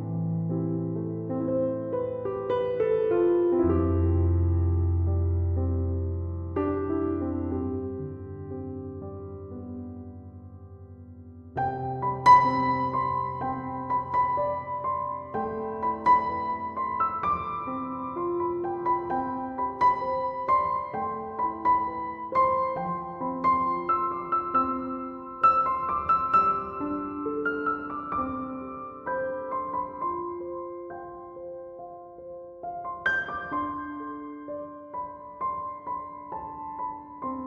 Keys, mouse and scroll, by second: 9.8 1, 10.0 0, 10.1 Return, 19.0 Return.